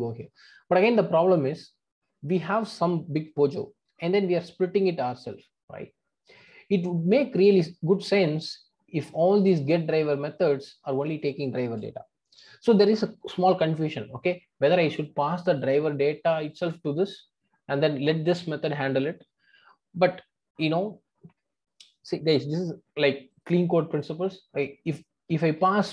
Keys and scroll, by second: 23.3 super+b.